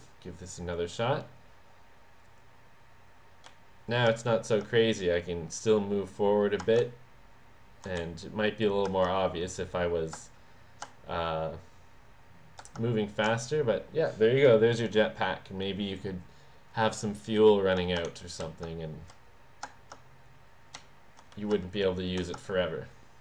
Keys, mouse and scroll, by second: 3.7 w, 6.9 d, 8.1 s, 18.1 shift+w, 18.5 a, 20.9 a, 21.5 w.